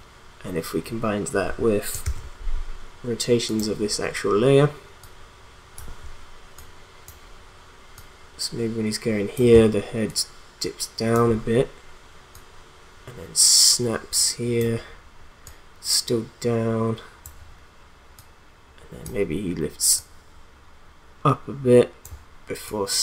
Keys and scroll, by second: 2.0 shift+r.